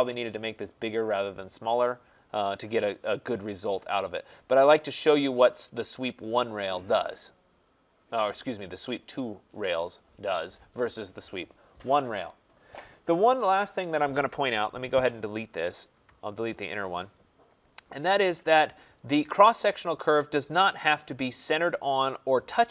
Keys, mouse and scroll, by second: 4.1 click, 5.2-5.5 scroll, 5.5-6.7 scroll down 3, 8.9-9.2 scroll up 5, 11.6-12.1 scroll down 4, 12.1 scroll, 12.6-13.4 scroll, 13.5 click, 14.6 Delete, 15.2 click, 15.9 Delete, 17.1 right click, 17.5-18.9 scroll down 3, 19.1 click.